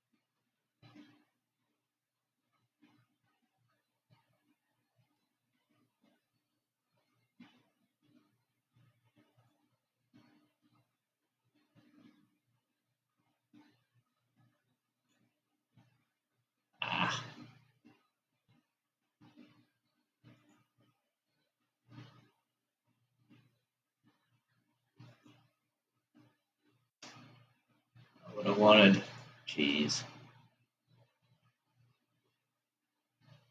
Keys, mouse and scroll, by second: 1.1-4.3 middle drag, 4.3-6.2 scroll up 4, 6.2-9.5 shift+middle drag, 9.9 click, 15.6 alt+click, 20.7 click, 25.4 alt+shift+click, 29.5 click, 33.2 alt+click.